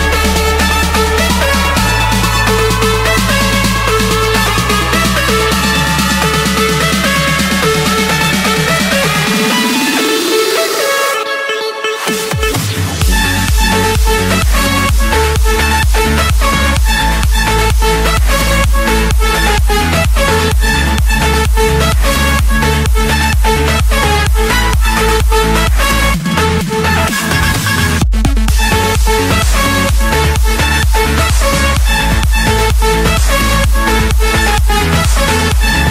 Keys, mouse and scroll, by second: 0.8 click, 1.3-2.6 scroll, 2.6-2.9 scroll down 10, 2.9-3.3 scroll up 4, 3.9 click, 4.7 click, 6.1 click, 6.7 click, 7.2 scroll down 3, 7.7 scroll, 7.9 Escape, 10.5 Escape, 11.5-12.2 typing, 13.1 Return, 14.5 click, 15.5 click, 15.9 Return, 17.5-18.7 typing, 18.6 Return, 19.9-20.5 drag, 21.2 click, 21.9 click, 23.0-24.1 drag, 24.6 Escape, 24.9 F7, 26.0 Escape, 26.0 click, 27.5 click, 28.5 click, 29.4 click, 29.8-30.4 scroll up 2, 30.6 scroll down 4, 31.1-31.6 scroll up 7, 32.7 click, 32.7 scroll down 9, 33.7 click, 34.9 click.